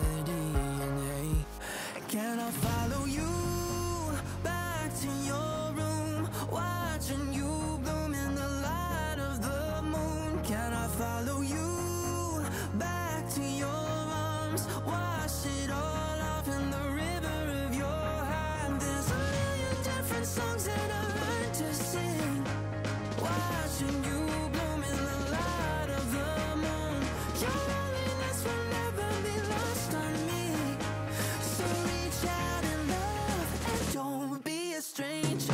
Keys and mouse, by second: 2.5 click, 3.1 click, 3.9 x, 4.0 click, 4.3 ctrl+z, 5.4 click, 5.8 click, 6.3 click, 7.7 ctrl+z, 9.0 click, 11.3 click, 12.6 click, 13.9 click, 15.3 click, 15.7 shift+click, 16.0 Return, 17.1 click, 18.1 click, 20.5 click, 20.7 click, 21.7 click, 25.4 click, 27.1 click, 28.1 click, 34.0 click, 35.2 click.